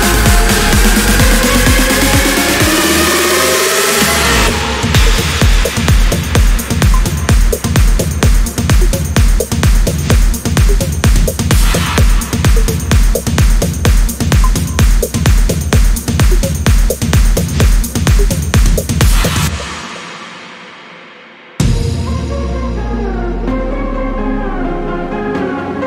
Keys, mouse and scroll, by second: 2.2 click, 3.6 click, 4.4 click, 5.9-6.2 scroll up 2, 6.9 scroll down 2, 7.4 scroll down 2, 8.1 click, 11.0 0, 11.5 scroll down 2, 12.0-12.4 scroll up 1, 14.2 click, 17.9 scroll down 2, 18.7-19.1 scroll down 2, 19.3 scroll up 2, 20.5 scroll up 2, 21.0 click, 21.9 click, 22.4 click, 23.1-23.4 scroll down 1, 23.6 scroll up 1, 24.5 scroll down 1, 25.6 click.